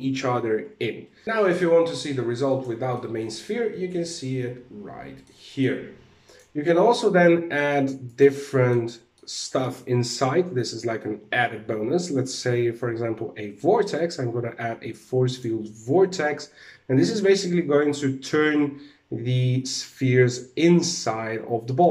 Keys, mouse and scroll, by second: 1.2 middle click, 2.0 click, 2.5 middle click, 5.0 middle click, 5.8 click, 7.6 click, 8.0 middle click, 8.6 middle click, 11.0 shift+a, 16.0 alt+a, 20.4 click, 21.4 click.